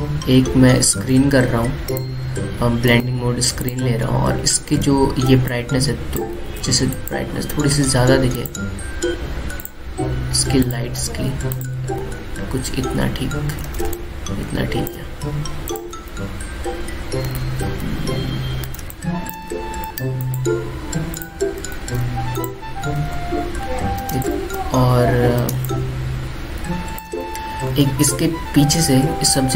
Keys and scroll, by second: 5.6 space, 7.1 ctrl+z, 8.2 ctrl+z, 14.5 alt+space, 18.1 ctrl+alt+z, 19.5 ctrl+alt+space, 22.4 ctrl+z, 24.2 alt+space, 25.1 alt+space, 26.2 alt+space.